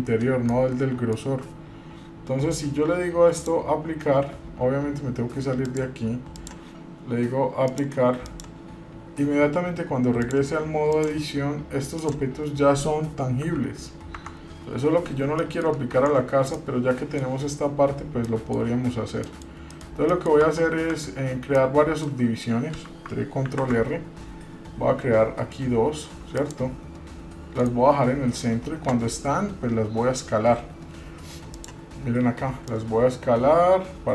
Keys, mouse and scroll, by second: 0.2 scroll up 1, 0.7 shift+middle click, 3.6 click, 5.8 click, 7.9 click, 10.4 click, 12.2 click, 13.6 g, 14.8-15.5 scroll down 4, 15.6 middle click, 16.2 Tab, 16.7 middle click, 17.5 scroll up 2, 18.5 middle click, 19.4 middle click, 19.7-20.1 scroll down 2, 19.9 middle click, 20.3 middle click, 20.7 Tab, 21.8 shift+middle click, 23.6 ctrl+r, 31.8 click, 32.9-34.1 drag.